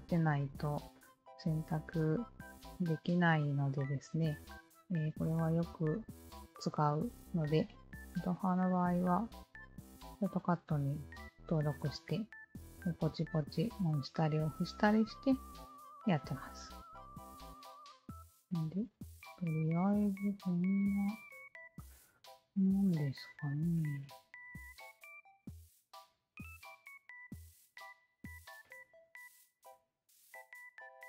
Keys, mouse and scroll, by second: 1.2 alt+click, 2.5-4.3 alt+drag, 5.6 alt+click, 7.8 alt+click, 8.8 d, 9.7 alt+click, 10.2 d, 12.5-14.5 alt+drag, 16.1 d, 16.9 alt+click, 17.4 Tab, 17.8 click, 18.5 alt+middle click, 18.8 drag, 18.8 alt+right click, 19.3 alt+middle click, 19.8 drag, 19.8 alt+right click, 20.8 click, 21.7 alt+click, 21.9 Tab, 22.4 alt+right click, 23.1 click, 23.7 alt+click, 24.9 d, 25.6 alt+click, 26.4 click, 27.3 alt+click, 27.9 Tab, 28.2 alt+click, 28.6 alt+click, 29.4 alt+right drag, 29.7 alt+click, 30.7 alt+middle click.